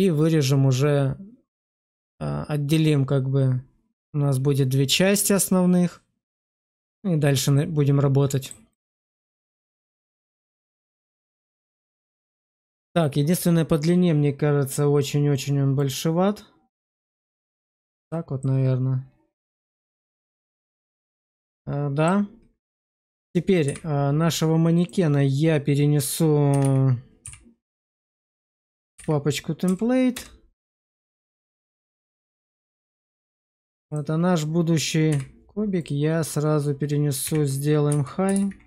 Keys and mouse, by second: 12.4-14.6 middle drag, 15.7 click, 18.3-20.7 middle drag, 21.1 middle click, 23.5 m, 35.0 m.